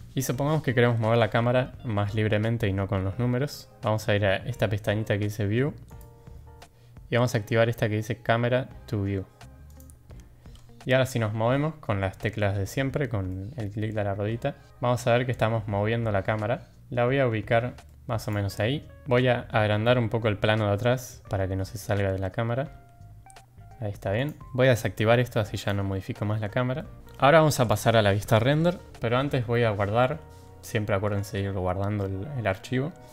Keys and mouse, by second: 5.9 click, 9.6 click, 13.2-14.3 middle drag, 14.6-16.9 middle drag, 17.8 middle click, 25.5 click, 26.7 middle click, 27.6 click.